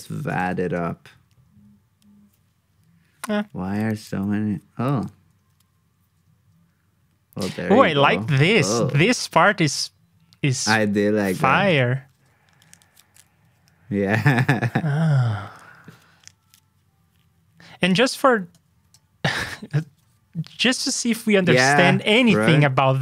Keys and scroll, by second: 0.0 super+c, 0.4 super+v, 12.1 super+Tab, 19.4 super+c, 19.6 super+Tab.